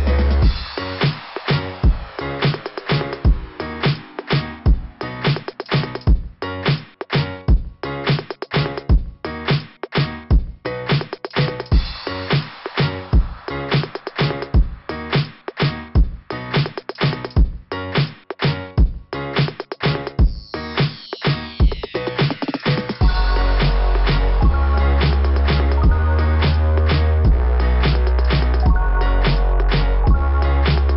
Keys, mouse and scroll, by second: 9.8 click, 12.3 click, 15.1 click, 15.4 click, 16.2 scroll up 2, 18.0 scroll down 2, 20.7 click, 21.2 click, 26.5 click.